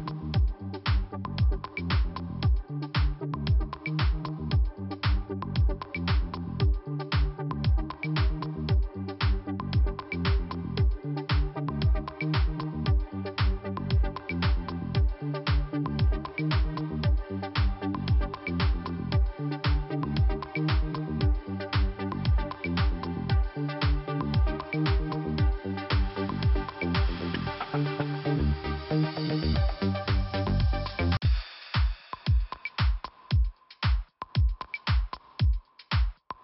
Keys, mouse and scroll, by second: 0.9 click, 6.3 scroll down 1, 7.0 scroll up 1, 9.0 click, 9.1 click, 10.7 click, 12.5 click, 18.9 click, 19.9 click, 25.2 click, 26.7 click, 29.4 click, 29.4 click, 29.9 scroll down 2, 30.9 p, 32.6 click, 32.7 click, 33.1 scroll up 1, 35.9 click, 36.0 click.